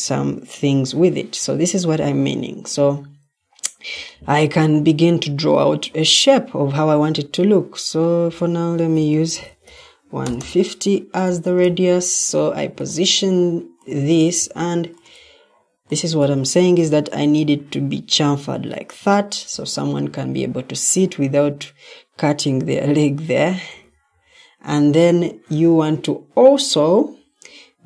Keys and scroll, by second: 8.8-10.0 typing, 10.1 Return, 10.3 Return, 12.1 ctrl+d, 14.3 ctrl+d, 23.6 Escape.